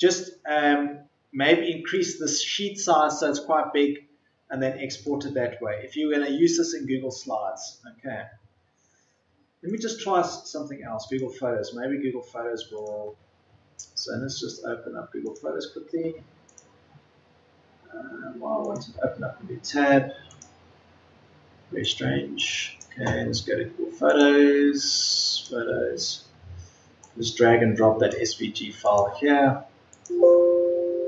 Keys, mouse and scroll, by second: 15.2 Delete, 21.0 Delete.